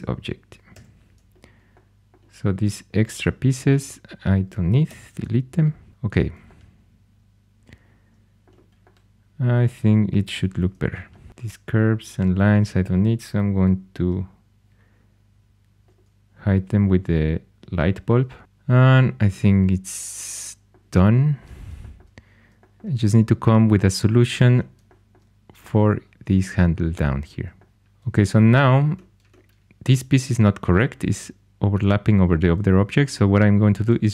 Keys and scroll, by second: 0.4-1.2 typing, 4.8 x, 10.3 alt+h, 33.8 shift+a.